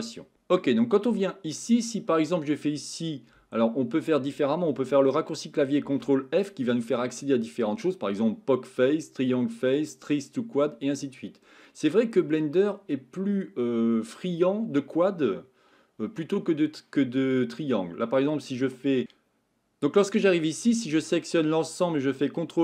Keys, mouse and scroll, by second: 1.2 shift+middle click, 12.7-14.2 middle drag.